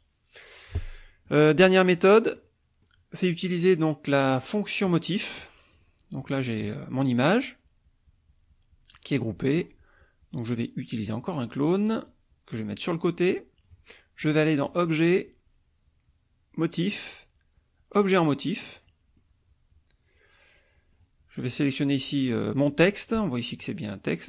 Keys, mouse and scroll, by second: 1.3 middle click, 2.1 middle click, 2.8 middle click, 4.9 middle click, 5.8 click, 6.2 middle click, 11.4 click, 12.1-13.8 drag, 14.7 click, 18.7 click, 18.9-21.1 middle drag, 21.5 click, 21.9 middle click.